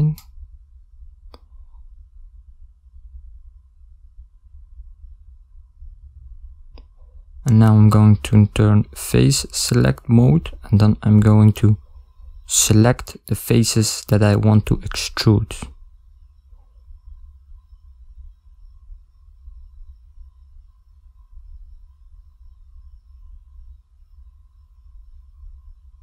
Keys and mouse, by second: 0.3 ctrl+middle click, 0.3 KP_1, 0.4 shift+middle click, 1.3 ctrl+middle click.